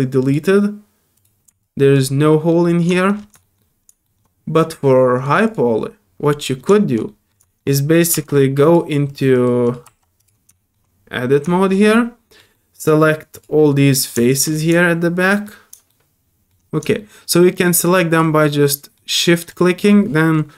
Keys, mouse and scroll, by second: 0.2 click, 1.1 click, 1.6 alt+click, 2.2 alt+middle click, 2.6 alt+middle click, 2.9 shift+middle click, 3.2 shift+middle click, 3.4 shift+middle drag, 4.0 shift+middle click, 5.1 shift+click, 5.4 shift+click, 6.6 shift+middle click, 7.0 shift+middle drag, 7.4 shift+middle click, 8.6 click, 9.1 click, 9.3 right click, 9.6 click, 10.2 click, 10.5 shift+Tab, 10.5 shift+middle click, 11.5 shift+middle click, 11.7 shift+middle click, 11.9 shift+middle click, 12.5 shift+middle click, 13.3 shift+click, 13.6 shift+middle click, 14.2 shift+middle click, 14.5 shift+middle click, 14.9 shift+middle click, 15.9 shift+middle click, 17.0 shift+middle click, 18.1 shift+click, 18.4 shift+middle click, 19.5 shift+click.